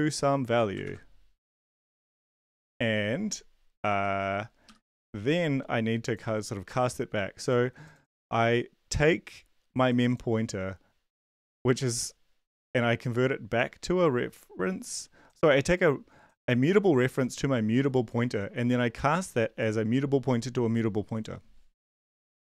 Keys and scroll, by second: 0.8 ctrl+v, 3.9 End, 4.7 shift+Home, 22.0 shift+Home.